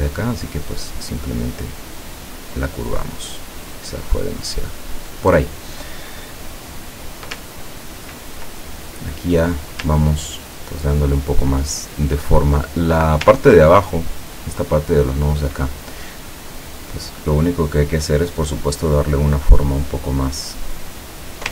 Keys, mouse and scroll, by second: 0.1-2.8 drag, 3.2-5.1 drag, 7.6-8.0 ctrl+scroll down 2, 8.3-9.9 ctrl+drag, 10.2 ctrl+scroll down 2, 11.9 ctrl+click, 13.4-13.7 ctrl+scroll down 2, 14.2 ctrl+click, 17.4 click, 20.6-21.5 drag.